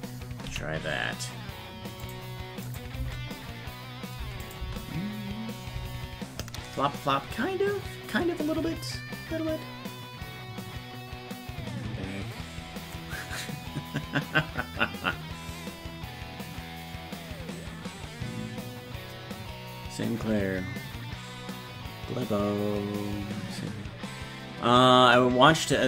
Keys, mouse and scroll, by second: 0.5 s, 2.7 click, 3.0 space, 4.5 click.